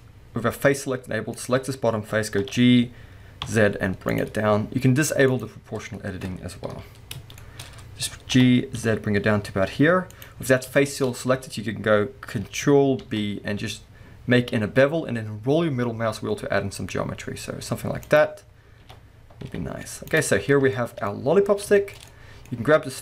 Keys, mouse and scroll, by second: 1.3 click, 1.7-2.4 scroll down 1, 2.4 g, 4.2 click, 5.3 click, 5.8-6.7 scroll down 1, 6.7 KP_1, 7.4 shift+middle click, 7.6-8.3 scroll up 2, 8.3 g, 10.2 click, 10.3-10.7 scroll up 2, 10.8-13.0 middle drag, 11.0-12.0 scroll up 1, 13.0 ctrl+b, 18.2 click, 18.8 g, 20.2 click, 20.3-20.7 scroll down 2, 20.7 shift+middle click, 22.1 middle click, 22.5-22.9 scroll up 2, 22.9 click.